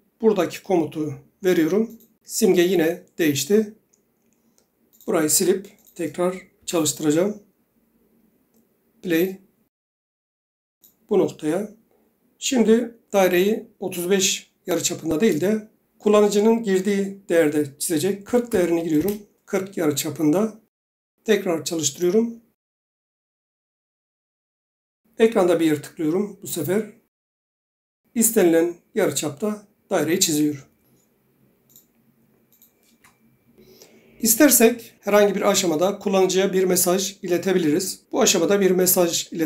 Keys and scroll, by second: 6.7 Delete, 18.4 typing, 19.1 Return, 30.4 Escape, 33.1 Delete.